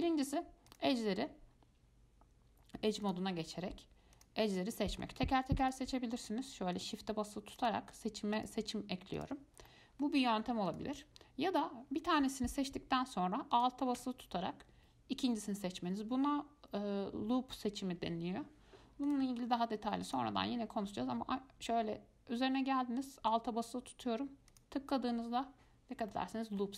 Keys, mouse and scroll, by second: 0.9 click, 3.2 click, 3.6 scroll up 1, 4.4 click, 4.8-5.8 middle drag, 5.8 shift+click, 6.4 shift+click, 7.0 shift+click, 7.8 shift+click, 8.6 shift+click, 9.4 shift+click, 9.9 middle click, 10.9 click, 12.2 click, 13.7 alt+click, 19.3 click, 20.3 click, 24.7 alt+click, 26.3 middle click.